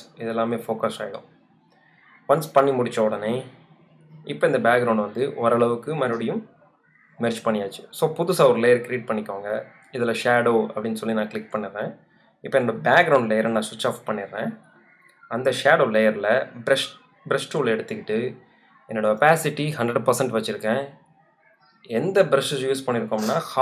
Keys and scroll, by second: 0.0 super+z, 8.1-9.0 typing.